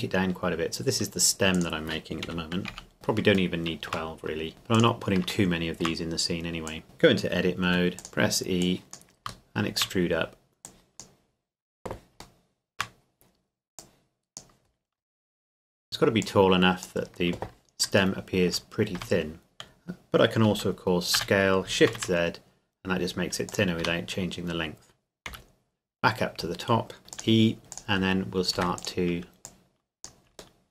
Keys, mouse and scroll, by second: 1.5-2.3 drag, 2.3 KP_Decimal, 2.7 KP_1, 2.9-3.3 scroll down 1, 3.5 shift+middle click, 4.1-4.5 scroll down 1, 4.5 s, 4.7 click, 5.5 shift+middle click, 6.7 click, 6.8 Tab, 7.7 e, 8.0 click, 9.5 shift+middle click, 9.9-10.7 scroll down 1, 10.7 click, 12.4 shift+middle click, 12.9 scroll down 1, 13.0 scroll up 1, 13.1-13.8 scroll down 1, 13.8 click, 14.7-15.0 scroll down 1, 16.2 click, 18.2 shift+middle click, 18.9 Tab, 21.2 s, 21.9 shift+z, 23.5 click, 23.8 Tab, 25.3 KP_Decimal, 26.1-26.4 scroll down 1, 27.0 e, 27.1 click, 27.6 s, 27.7 click, 28.1 scroll down 1, 28.5 e, 28.8 click, 30.6 shift+middle click.